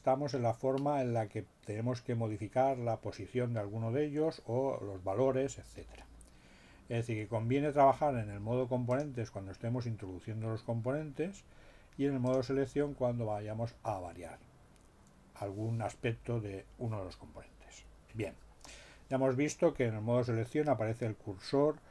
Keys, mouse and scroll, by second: 8.9 click, 12.2 click.